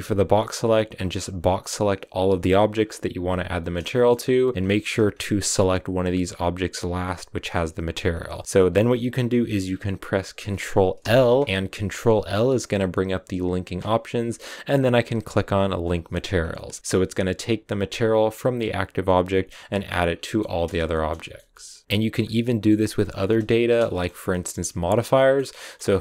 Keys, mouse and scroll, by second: 2.6 b, 3.4 middle click, 3.9-4.5 scroll up 4, 4.5 shift+right click, 4.9-6.5 scroll up 2, 6.5-7.9 shift+right drag, 7.9 scroll down 1, 8.1 middle click, 8.3 scroll up 2, 8.4-15.7 middle drag, 16.2 scroll down 3, 16.3 middle click, 16.7 scroll up 1, 16.8-18.7 right drag, 18.7-19.8 scroll down 1, 19.8-20.1 scroll down 3, 20.1-22.0 middle drag, 22.0 scroll up 1, 22.2-23.6 middle drag, 23.6 space, 23.7 shift+middle click, 24.0-24.9 scroll up 3, 24.1 middle click, 24.9 shift+middle click, 25.4 scroll up 1, 25.5-26.0 shift+middle drag.